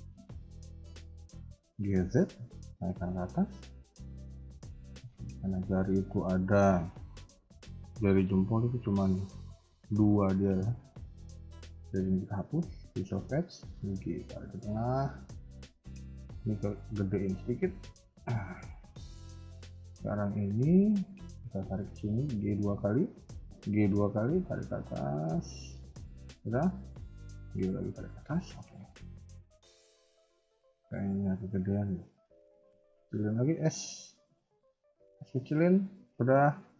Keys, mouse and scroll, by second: 0.4 scroll down 2, 0.6 shift+middle click, 1.0 scroll up 1, 1.4 g, 3.9 shift+middle click, 4.3 scroll up 2, 4.5 Tab, 5.3 alt+click, 11.0 x, 12.9 alt+click, 13.4 g, 15.1 Tab, 16.8 s, 19.4 Tab, 19.8-20.7 scroll down 2, 20.7 b, 21.7 g, 26.6 alt+click, 27.0 g, 28.4 KP_1, 29.7 KP_3, 30.1 Tab, 30.6 shift+middle click, 30.9-31.4 scroll up 2, 31.5 s, 35.7 scroll down 2, 36.0 shift+middle click, 36.5 scroll up 1.